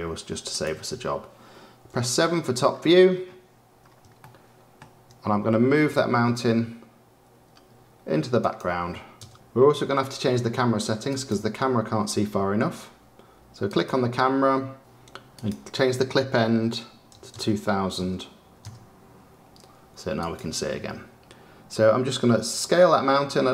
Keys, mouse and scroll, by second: 0.5 click, 1.8 KP_7, 2.6-3.7 scroll down 9, 3.7-4.1 scroll down 2, 4.1-5.8 shift+middle drag, 5.8 g, 11.2 click, 18.6 KP_0, 20.2 click, 22.5 s.